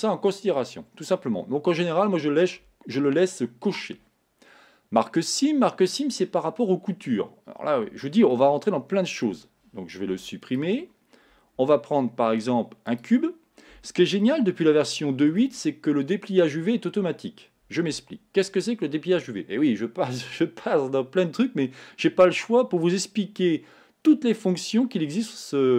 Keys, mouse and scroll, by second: 8.3-10.1 shift+middle drag, 10.1 x, 11.6 shift+a, 13.6-14.2 scroll down 3, 14.2-17.9 middle drag.